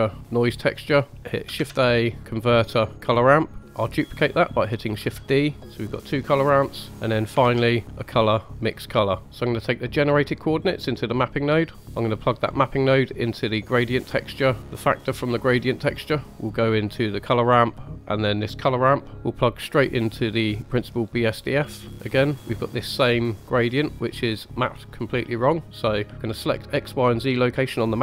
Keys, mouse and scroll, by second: 2.3 shift+a, 4.9 shift+d, 6.0 click, 7.4 shift+a, 9.2 scroll up 2, 10.5-13.9 drag, 16.1-17.2 drag, 18.3-20.9 drag, 21.8 scroll up 2, 22.3 middle click, 23.3 click, 24.5-24.9 middle drag, 25.9-28.0 drag.